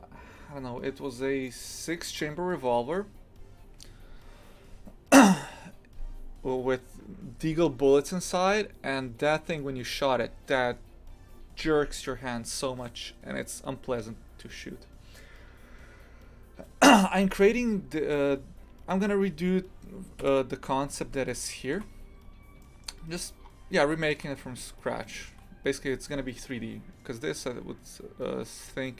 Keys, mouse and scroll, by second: 17.7 scroll down 1, 18.5 scroll up 2, 18.9-20.2 middle drag, 20.2 KP_3, 20.9 scroll down 1, 21.3 shift+middle click, 21.9-22.6 scroll up 1, 22.6 shift+middle click, 23.0-23.4 scroll up 1, 23.4-23.9 scroll down 2, 23.9 shift+middle click, 24.8-25.1 scroll up 2, 25.1-28.1 shift+middle drag.